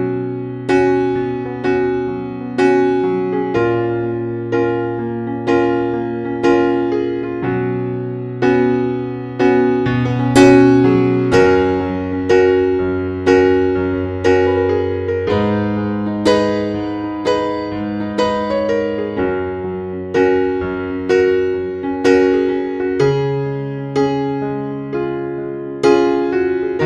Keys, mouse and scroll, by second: 0.0 Page_Down, 0.7 Page_Down, 1.8 click, 3.5 F8, 5.2 click.